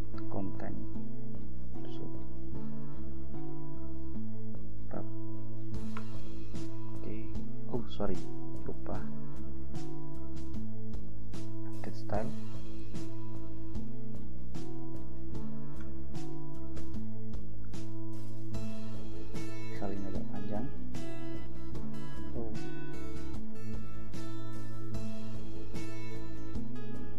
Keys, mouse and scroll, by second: 0.0-2.5 typing, 3.5 shift+BackSpace, 4.1 shift+u, 4.5 shift+b, 5.0 shift+a, 6.2 Return, 8.8 click, 10.5 click, 11.8 click, 12.8 click, 14.0 Return, 14.7 ctrl+v, 15.9 Return, 16.8 ctrl+b, 19.5 scroll down 2, 20.6 ctrl+v, 22.3 ctrl+z, 23.2-24.9 drag, 25.3 ctrl+c, 26.0 click, 26.7 ctrl+v.